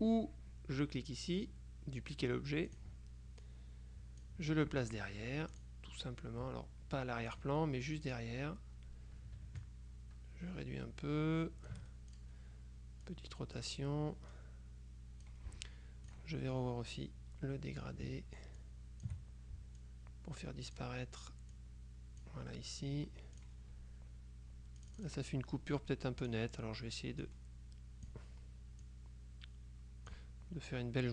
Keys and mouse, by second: 2.8 click, 3.5-4.8 drag, 5.6 click, 7.4 click, 8.2 click, 9.7-12.8 ctrl+shift+drag, 13.2-14.2 drag, 14.4-15.8 drag, 16.2 click, 18.7 ctrl+shift+click, 19.9-21.3 drag, 21.6-22.8 drag, 23.5 click, 24.9 click, 26.4 click, 27.4-28.7 drag, 28.9-30.7 drag.